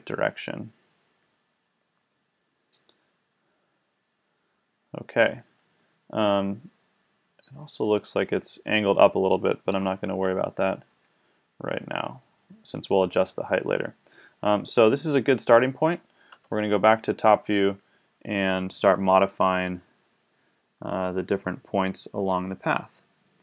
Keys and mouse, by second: 1.8-3.0 middle drag, 9.7 KP_5, 10.9 KP_5, 16.3 KP_7, 19.0 middle click, 19.7-23.4 middle drag.